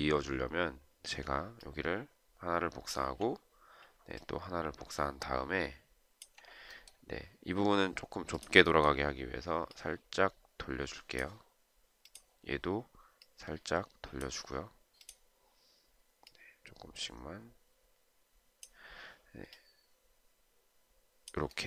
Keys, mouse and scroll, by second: 1.6 alt+click, 4.3 alt+click.